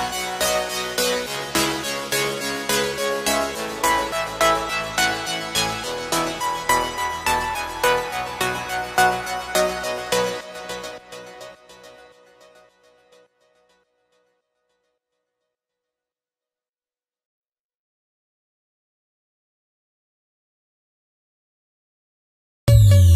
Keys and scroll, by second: 0.0 ctrl+=, 5.8 ctrl+=, 7.5 space, 21.8 space.